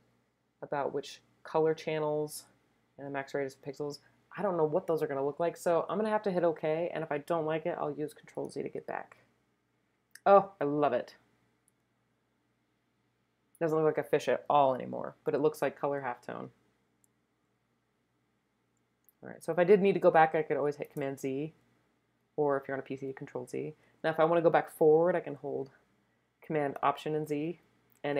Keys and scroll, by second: 20.9 super+z, 27.3 alt+super+z.